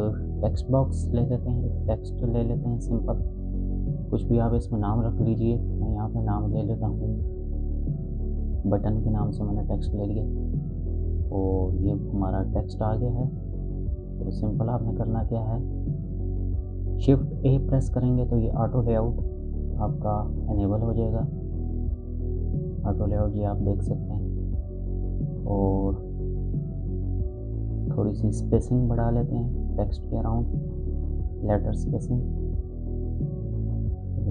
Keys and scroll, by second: 6.8-8.5 typing, 17.5 shift+a.